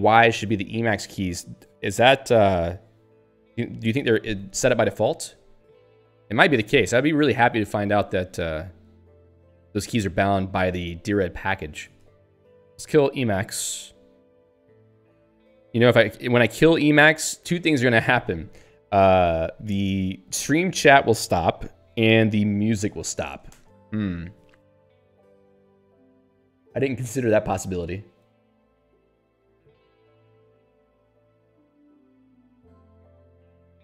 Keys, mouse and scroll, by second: 7.4 click, 7.9 ctrl+s, 12.0 ctrl+c, 12.5-13.5 typing, 23.5 ctrl+g.